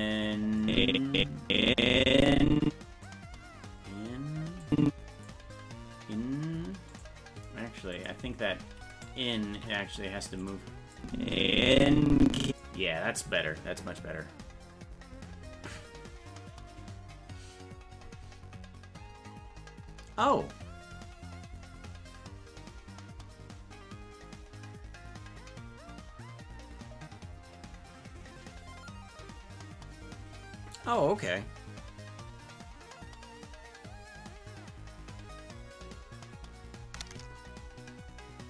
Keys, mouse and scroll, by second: 0.6-3.1 drag, 4.7 click, 6.9 click, 7.9 click, 8.9 right click, 9.6 g, 11.0-12.6 drag.